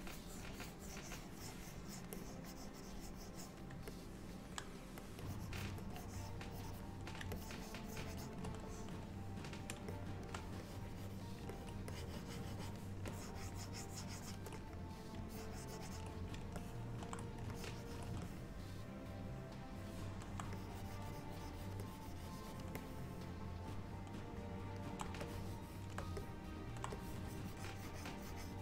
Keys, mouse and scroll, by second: 0.1 click, 2.2 click, 4.0 middle click, 5.1 click, 5.3 click, 5.6 click, 5.9 click, 6.5 click, 7.4 ctrl+click, 7.7 ctrl+click, 8.5 ctrl+click, 8.7 middle click, 10.0 middle click, 10.7 click, 11.0 click, 11.6 ctrl+click, 11.7 ctrl+click, 12.0 click, 13.2 ctrl+click, 15.4 ctrl+click, 16.6 ctrl+middle click, 17.6 ctrl+click, 18.3 middle click, 20.6 click, 21.9 click, 22.8 middle click, 25.3 shift+click, 26.3 middle click, 27.0 click.